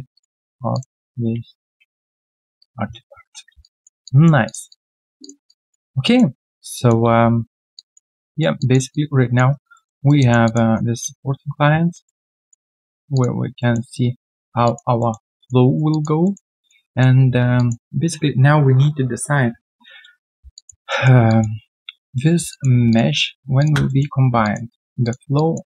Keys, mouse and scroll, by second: 2.5 ctrl+Delete, 2.6 right click, 3.1 scroll down 1, 3.2 3, 3.6 alt+click, 4.7 alt+click, 6.4 alt+middle click, 6.7 alt+click, 7.2 typing, 7.2 right click, 7.7 alt+click, 8.1 alt+right click, 8.1 click, 8.9 alt+double click, 9.5 alt+right click, 9.7 alt+middle click, 10.0 alt+right click, 10.2 alt+click, 10.6 1, 12.0 alt+middle click, 12.4 alt+click, 12.7 alt+middle click, 12.9 alt+right click, 13.1 alt+click, 13.6 alt+middle click, 14.6 alt+click, 15.0 alt+middle click, 15.3 alt+click, 15.6 alt+right click, 15.9 alt+click, 16.2 alt+middle click, 16.5 alt+click, 16.8 alt+middle click, 17.2-17.5 alt+scroll down 1, 17.5 alt+click, 20.3 alt+click, 20.9 alt+middle click, 21.2 alt+click, 22.3 alt+click, 22.5 alt+click, 23.6 shift+click, 23.8 alt+middle click, 24.4 alt+click, 25.3 alt+click.